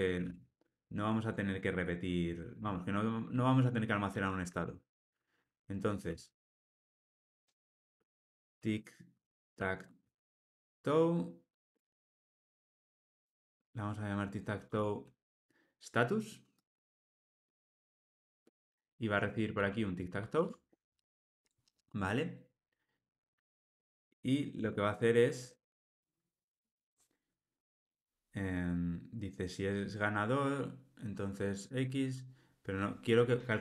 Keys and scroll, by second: 1.6 Escape, 14.7 Tab, 20.3 Tab.